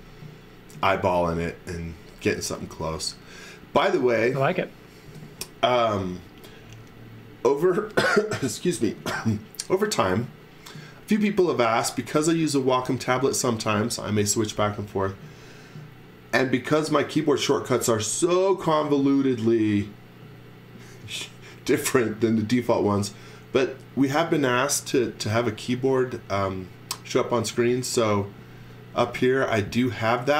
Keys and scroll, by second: 1.7 z, 2.7 x, 5.0 space, 27.5 space, 28.4 x, 29.0 v.